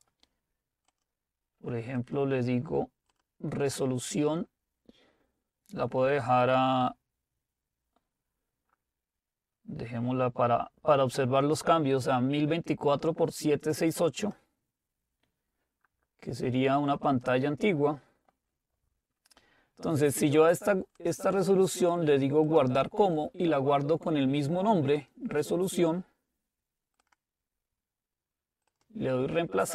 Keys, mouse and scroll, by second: 0.9 click, 14.2 click, 17.1 click, 21.0-24.1 drag, 25.0 click, 27.0-29.7 drag.